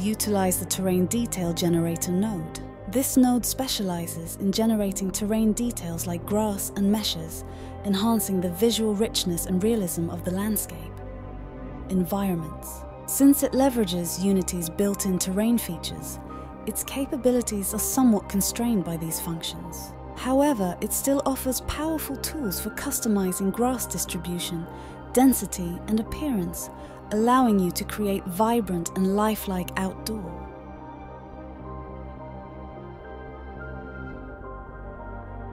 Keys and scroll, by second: 2.3-3.1 typing, 13.6-14.9 typing, 21.3 Escape, 33.3-34.9 typing.